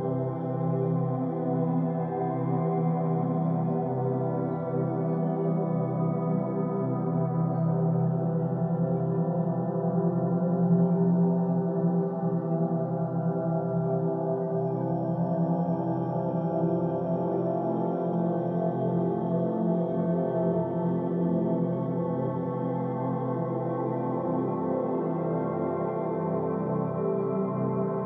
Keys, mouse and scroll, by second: 2.4 Tab, 4.0-4.5 scroll up 2, 4.5-6.6 scroll down 1, 6.6-7.6 middle drag, 7.6-8.7 scroll up 2, 8.7 middle click, 9.6-9.9 scroll down 1, 10.2-10.6 scroll down 1, 10.6 right click, 12.0 shift+right click, 16.9-19.9 drag, 20.8-22.3 middle drag, 22.3-23.5 drag.